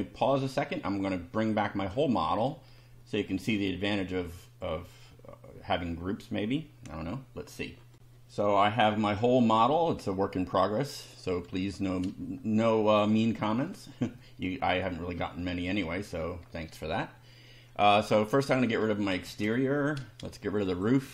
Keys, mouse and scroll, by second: 1.4 scroll down 2, 1.9 scroll down 2, 2.4-3.2 shift+middle drag, 7.9 ctrl+r, 13.6 shift+middle click, 14.6 shift+scroll up 3, 15.6-16.2 shift+middle drag, 18.3 click, 19.2 space, 20.7 click, 21.0 space.